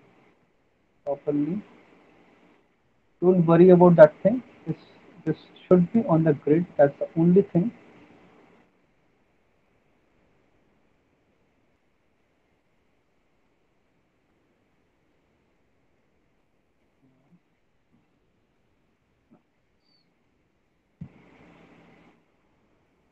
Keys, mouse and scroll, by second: 0.4 alt+middle click, 0.8 middle click, 2.1 alt+middle click, 6.8 middle click, 8.7 alt+middle click, 9.9 click, 10.5 middle click, 11.0 middle click, 11.1 alt+middle click, 12.8 click, 13.2 ctrl+z, 13.8 click, 15.6 click, 16.7 alt+middle click, 17.1 middle click, 17.7 click, 17.7 middle click, 19.1 click, 19.6 middle click, 19.7 alt+middle click, 20.3 middle click, 20.6 alt+middle click, 21.6 click.